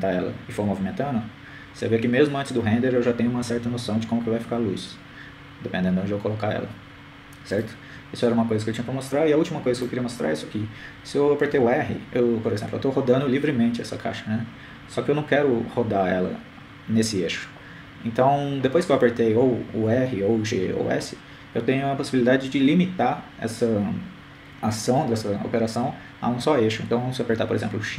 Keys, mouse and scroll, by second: 1.1 right click, 2.1 g, 12.5 right click, 14.1 r.